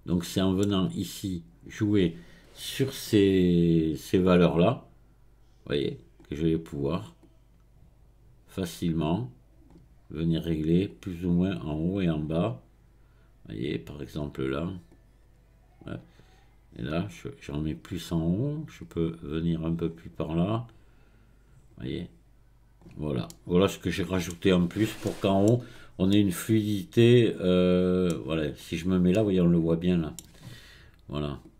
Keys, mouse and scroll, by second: 0.2-3.3 middle drag, 4.3-10.2 drag, 10.9-14.0 drag, 14.9-18.0 drag, 18.8-23.3 drag, 23.3-24.6 middle drag, 24.6-25.1 scroll down 2, 25.1-25.7 middle drag, 25.7-26.1 scroll up 1, 26.1-28.2 middle drag, 28.2-29.1 scroll down 1, 29.1-31.4 middle drag, 31.4-31.5 drag.